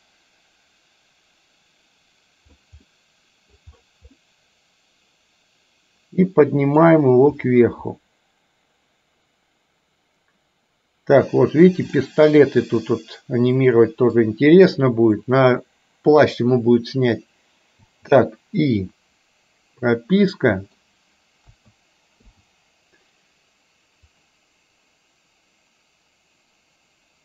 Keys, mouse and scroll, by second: 2.9 middle click, 4.3-6.9 middle drag, 12.1 scroll up 1, 12.2-14.3 middle drag, 17.8 i, 20.3 middle click, 21.7 a, 22.3 i, 24.2-27.2 drag.